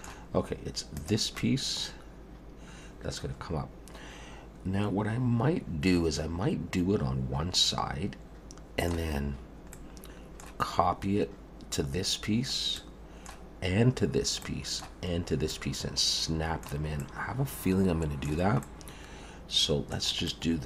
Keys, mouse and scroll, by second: 1.0 click, 1.4 middle click, 9.7 middle click, 14.4 middle click, 15.5 middle click, 17.0 middle click, 18.6 middle click, 20.3 middle click.